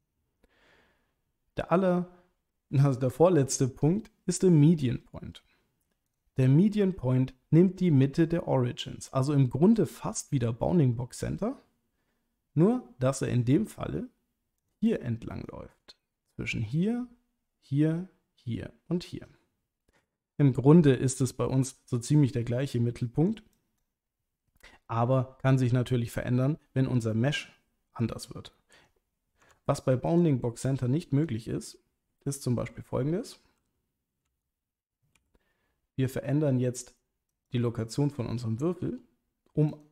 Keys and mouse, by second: 0.1-6.2 drag, 14.6 click, 14.9 click, 15.4-20.2 drag, 23.0 click, 23.5 click, 29.4 Tab, 30.1 click, 30.6 click, 34.3 l, 35.1 g, 37.3 click, 38.8 g, 39.7 click.